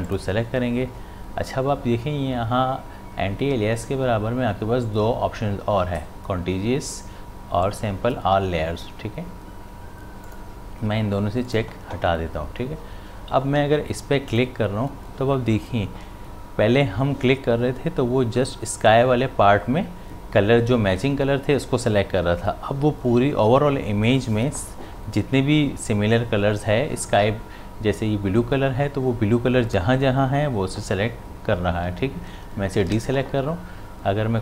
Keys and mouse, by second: 0.1 click, 10.2 click, 14.3 click, 32.8 ctrl+z.